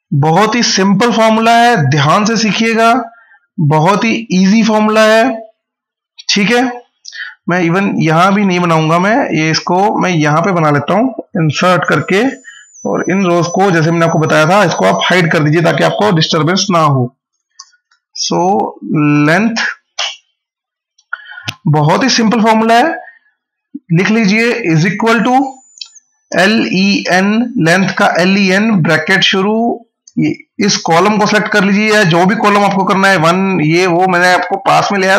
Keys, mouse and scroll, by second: 7.5 ctrl+click, 7.8 ctrl+z, 9.8 click, 10.1 right click, 11.2 click, 13.7 right click, 14.8 click, 17.4-19.6 typing, 19.8 Return, 24.5 =, 26.0-27.4 typing, 28.5 shift+9, 29.6 Left.